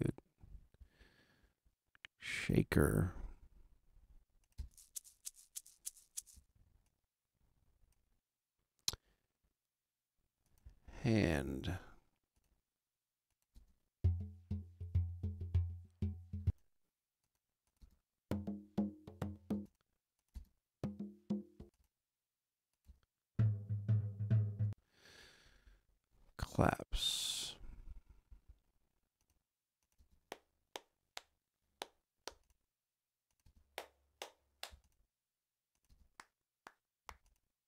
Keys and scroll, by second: 4.5 space, 13.5 space, 16.3 space, 17.7 space, 21.5 space, 24.6 space, 30.0 space, 32.3 space, 34.7 space, 35.8 space, 37.0 space.